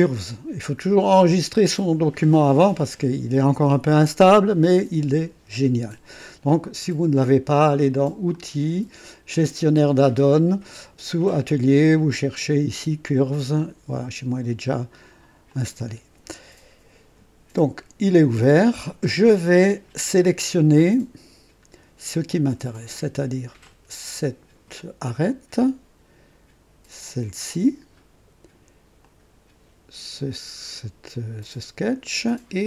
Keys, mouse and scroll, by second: 0.1 click, 8.3 click, 9.3 click, 12.0-12.4 scroll down 2, 15.4 click, 23.6 click, 27.1 ctrl+click, 29.0 ctrl+click.